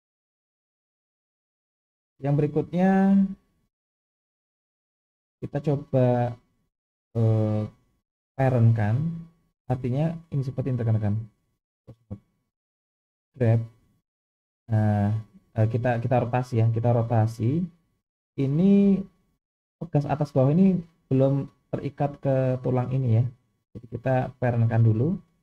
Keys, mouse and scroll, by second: 0.1-1.1 scroll up 2, 1.3-2.4 scroll down 3, 2.4-3.3 scroll up 3, 3.5 shift+middle click, 4.5-5.1 scroll down 2, 5.2 shift+middle click, 7.0-7.9 scroll up 1, 10.7-11.3 drag, 12.0 click, 13.5 g, 23.3-24.3 scroll up 2, 24.3 click.